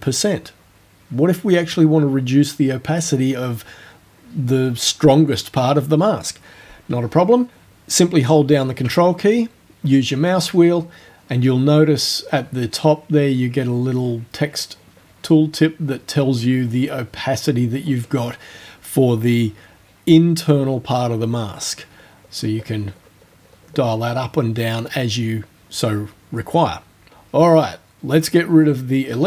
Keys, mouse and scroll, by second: 10.2-10.7 ctrl+scroll up 4, 11.1 ctrl+scroll up 2, 13.3 ctrl+scroll up 2, 14.2 ctrl+scroll up 2, 14.9-16.0 ctrl+scroll up 6, 16.6-17.7 ctrl+scroll up 8, 18.2 ctrl+scroll up 2, 19.7-20.6 ctrl+scroll down 6, 21.3-21.8 ctrl+scroll down 2, 21.9-22.4 ctrl+scroll down 4, 23.0-25.2 ctrl+scroll down 2, 28.7 right click.